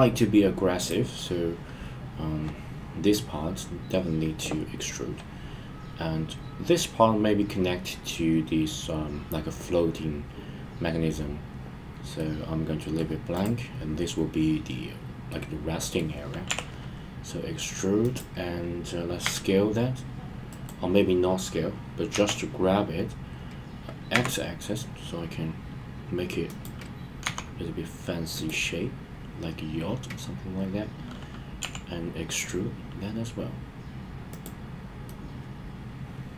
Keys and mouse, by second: 12.2-13.0 middle drag, 15.3-16.0 middle drag, 18.0 click, 19.2 s, 20.5 right click, 22.1 g, 24.1 x, 26.4 click, 27.2 s, 28.3 click, 31.6 e, 34.3 click, 35.0-36.3 middle drag.